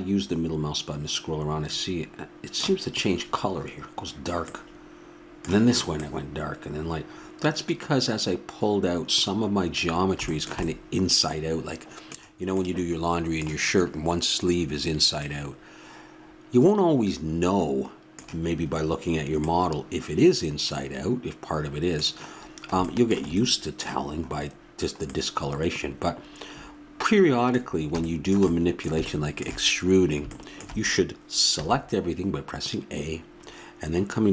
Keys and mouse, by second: 4.5 middle click, 4.9-8.6 middle drag, 11.2 middle click, 15.3 middle click, 16.6 middle click, 31.5 a.